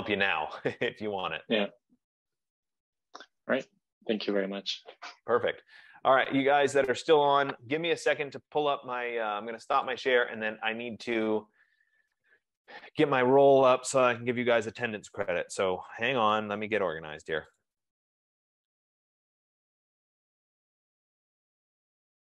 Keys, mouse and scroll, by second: 0.1 click.